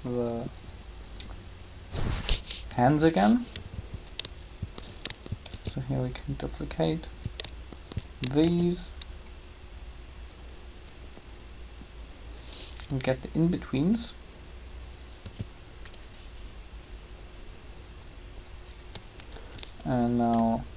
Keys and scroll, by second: 5.5 shift+d, 8.4 shift+d, 12.9 r, 15.2 r.